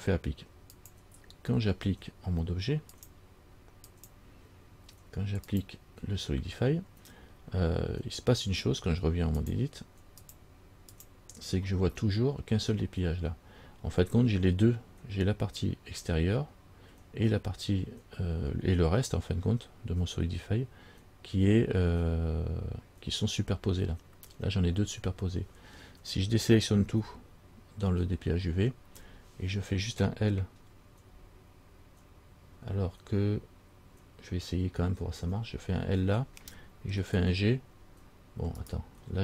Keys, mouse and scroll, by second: 1.0 click, 3.1 click, 5.7 click, 9.6 click, 10.4 click, 28.3 a, 35.4 l, 37.4 g.